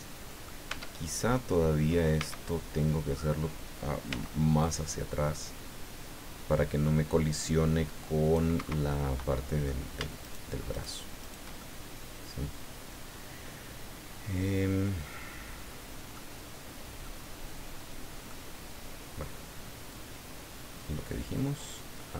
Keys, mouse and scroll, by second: 0.7 Tab, 1.3 middle click, 2.2 a, 4.1 c, 4.6-8.5 drag, 8.6 Escape, 8.9 middle click, 10.2 shift+right click, 10.7 shift+right click, 11.2 shift+right click, 11.6-16.3 shift+middle drag, 17.0-18.4 middle drag, 19.9 click, 20.8 scroll down 1.